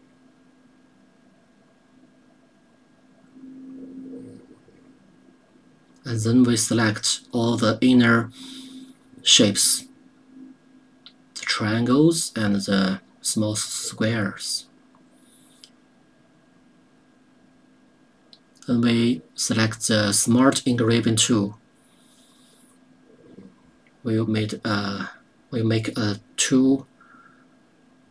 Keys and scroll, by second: 22.0 KP_0.